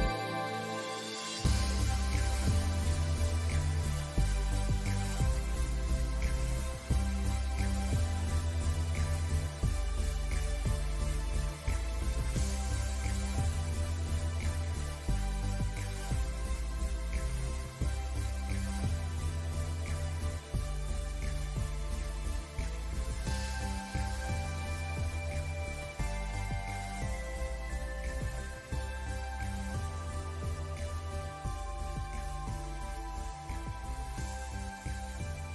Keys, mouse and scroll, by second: 9.1 click, 10.3 space, 10.4 click, 10.7 space, 11.2 alt+scroll up 1, 11.4 click, 15.0-21.0 drag, 21.5 space, 21.6-22.1 scroll down 2, 21.7 space, 22.4 space, 22.5 click, 22.6 space, 23.1 alt+scroll up 1, 23.3 scroll down 1, 24.2 alt+scroll up 1, 24.9-27.1 drag, 29.1 alt+scroll down 1, 29.3 space, 29.4 click, 30.1-35.0 drag.